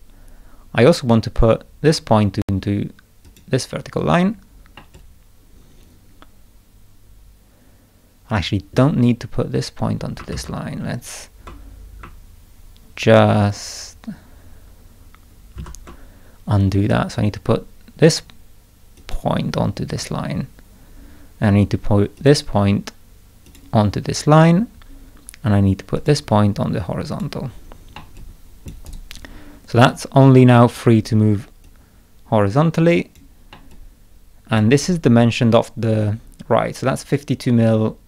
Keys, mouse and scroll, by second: 1.9 click, 3.2 click, 4.7-8.7 middle drag, 4.9-8.7 drag, 10.3 ctrl+z, 15.5 ctrl+z, 18.9 click, 19.9 click, 22.1 click, 23.4 click, 25.9 click, 27.1 click, 27.9 middle click, 28.1 click, 28.8 right click, 29.9-30.7 drag, 31.6-33.1 drag, 33.5-34.5 middle drag, 33.7 click, 36.5-37.1 scroll down 2, 37.7 scroll down 1.